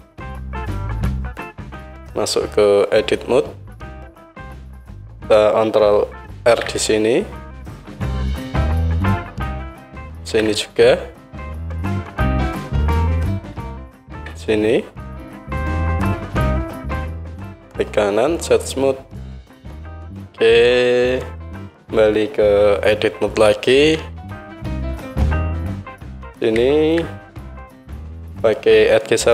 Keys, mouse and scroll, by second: 0.1-3.1 drag, 1.6 Tab, 3.1-8.9 middle drag, 5.7-8.9 ctrl+drag, 5.7-16.8 ctrl+right drag, 6.4 ctrl+r, 10.2 ctrl+r, 14.1 ctrl+r, 16.8 Tab, 17.4 Tab, 17.4-24.7 right drag, 21.7 KP_1, 24.0 Tab, 24.7 middle click, 26.2-29.3 alt+right drag, 29.2-29.3 drag, 29.2-29.3 middle drag.